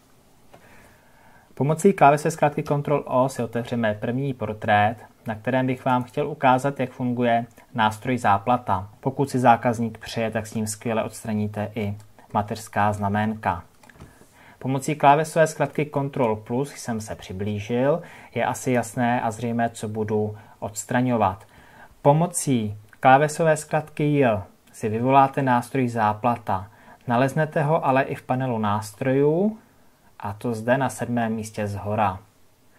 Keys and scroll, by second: 2.6 ctrl+o, 10.7 ctrl+KP_Add, 27.7 j.